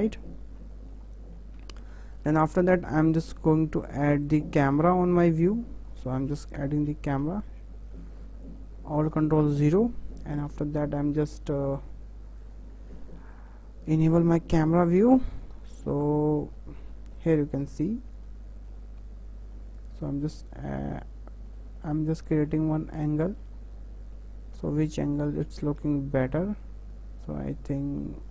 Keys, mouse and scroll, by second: 0.3-0.7 scroll up 5, 0.7-5.3 shift+middle drag, 7.0 ctrl+alt+KP_0, 8.6-10.5 shift+middle drag, 10.5 n, 12.4 click, 12.8 n, 13.4-28.3 shift+middle drag.